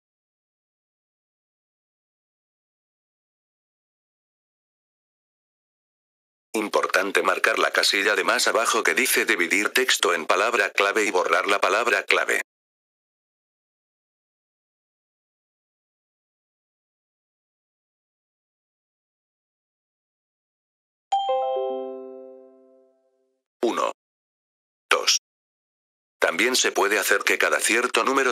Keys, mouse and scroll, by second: 2.3-4.1 drag, 6.0 F4, 6.4-7.6 drag, 8.3-14.6 drag, 15.3-17.2 drag, 18.9 click, 22.8 click, 23.1 click, 24.2 click, 24.4 click, 25.1 F4, 26.1 click.